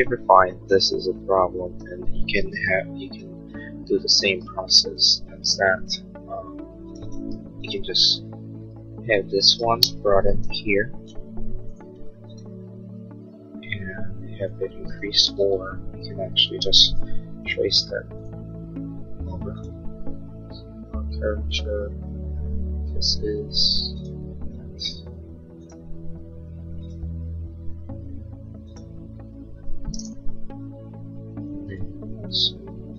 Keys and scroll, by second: 3.9 h, 9.4 ctrl+c, 10.0 space, 10.2 Escape, 12.3 p, 14.8 Escape, 15.8 ctrl+z, 16.8 space, 32.8 a.